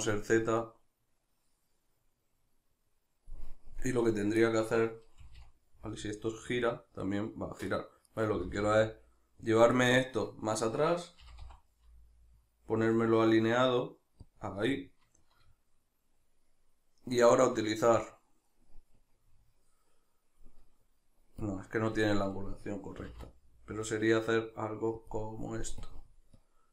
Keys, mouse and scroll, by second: 0.4-4.1 drag, 4.1 right click, 4.4-7.8 middle drag, 5.3 r, 8.1 right click, 8.3 r, 9.6 click, 9.8-14.4 middle drag, 11.2 g, 14.4 click, 14.6-17.3 middle drag, 17.3 right click, 19.0-25.1 drag, 23.0 r.